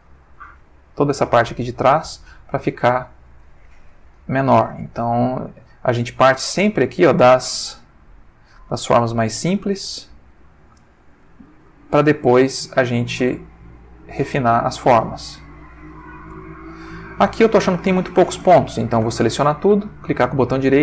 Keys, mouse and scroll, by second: 1.7 click, 2.7-3.5 ctrl+middle drag, 4.0 shift+middle click, 5.0 click, 6.0-7.2 drag, 7.2-7.7 scroll up 1, 11.0 click, 12.0 shift+click, 12.7-14.9 drag, 14.9 scroll up 2, 15.7 scroll up 2, 19.0 a, 19.9 right click, 20.6 click.